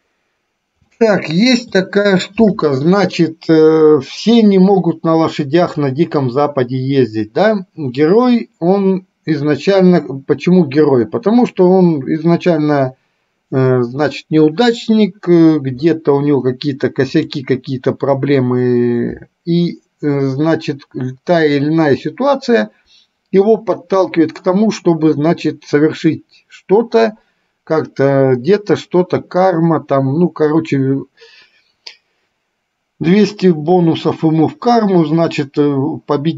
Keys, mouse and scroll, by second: 1.0-2.0 shift+middle drag, 17.3 click.